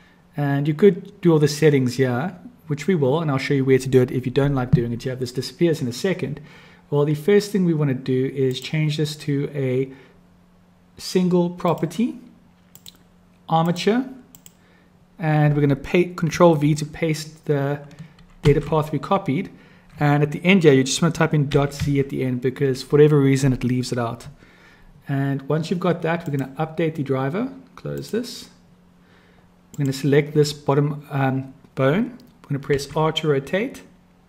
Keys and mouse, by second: 14.4-28.2 drag, 29.8 click, 32.7 r.